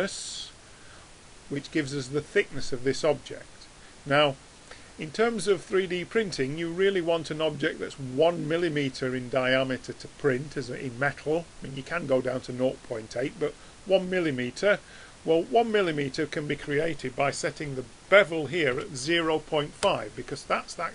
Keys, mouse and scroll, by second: 17.6 BackSpace.